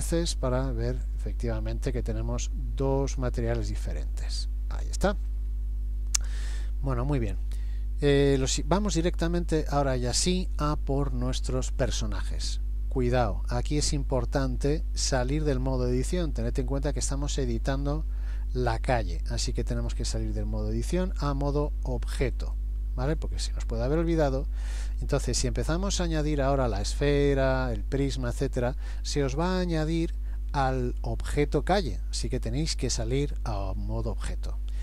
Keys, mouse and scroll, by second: 0.3 middle click, 12.5 middle click, 16.6 middle click, 19.9 click, 23.6-24.9 scroll up 5, 24.9-26.3 scroll down 1, 27.2-27.7 scroll down 1.